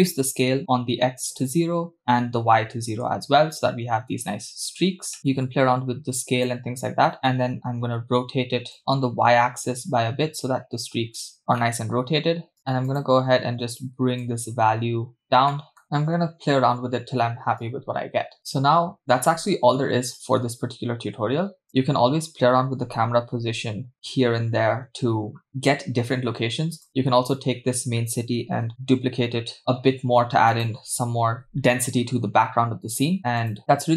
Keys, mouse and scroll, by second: 2.0-3.1 drag, 5.2-6.5 drag, 5.2 middle click, 7.1 middle click, 8.8-11.4 drag, 11.6 middle click, 12.6-12.9 scroll down 2, 12.9 click, 15.6 middle click, 16.9-17.6 scroll up 2, 17.6 scroll up 1, 17.6 click, 21.7 click, 23.1 r, 26.8 drag, 28.7 alt+d, 29.6 g.